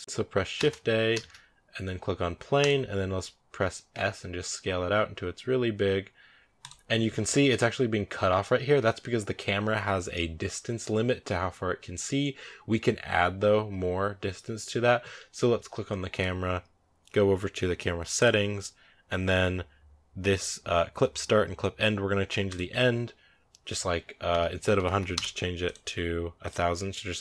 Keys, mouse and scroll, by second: 0.0 KP_0, 2.5 shift+a, 3.8 s, 6.9-7.6 scroll up 6, 7.2 shift+middle drag, 10.9-11.5 right drag, 11.5 scroll down 2, 16.0 right click, 25.0 0.